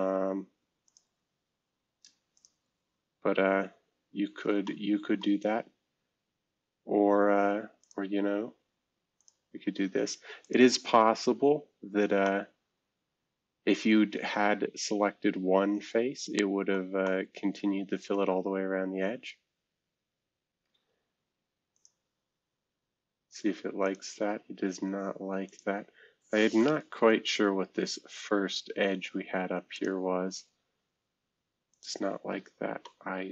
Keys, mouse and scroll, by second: 0.8 click, 2.3 click, 2.8 scroll down 2, 3.4 scroll down 6, 4.2-5.1 scroll up 2, 4.6 middle click, 5.5 scroll down 2, 6.0-7.8 scroll up 2, 7.8 click, 9.2 click, 10.4 click, 11.1-11.9 scroll down 8, 12.2-16.7 middle drag, 17.0-18.7 middle drag, 18.7-20.2 scroll up 2, 21.7 click, 23.8 click, 25.4 click, 27.0 Delete, 29.7 click, 31.7 click, 32.3-32.8 scroll down 2, 32.8-33.3 middle drag.